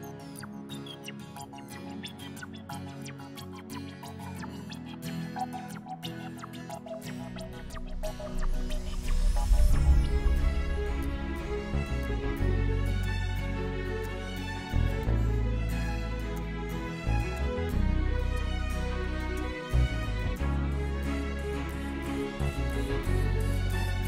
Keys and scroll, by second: 3.4 Caps_Lock, 4.0 v, 4.6 e, 10.4-12.0 typing.